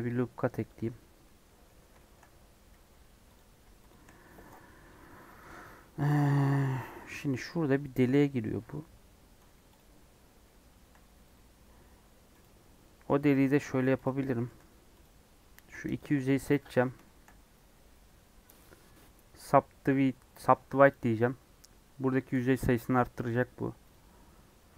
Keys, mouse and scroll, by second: 0.8 scroll down 1, 1.2 middle click, 2.1 scroll up 2, 2.9 3, 3.3 click, 9.7 shift+Left, 11.9 right click, 12.4 click, 12.6 scroll down 3, 12.8 middle click, 13.1 scroll up 1, 13.3 a, 14.0 m, 14.2 middle click, 14.4 3, 15.0 click, 16.8-17.5 scroll up 3, 17.0 shift+middle click, 20.9 right click, 21.6 scroll up 2, 22.9-24.7 middle drag.